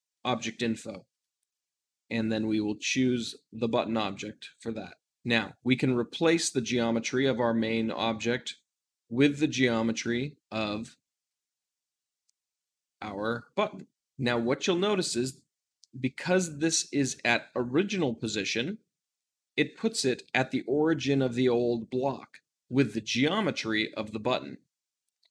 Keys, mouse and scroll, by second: 0.0-14.1 drag, 14.1-25.3 middle drag.